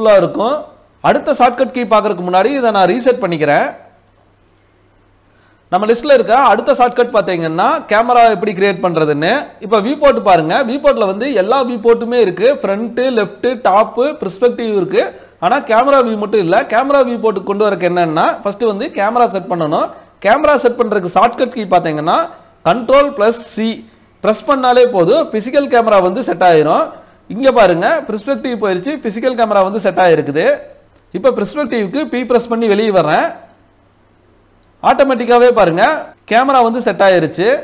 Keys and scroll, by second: 22.1 ctrl+c, 31.5 p.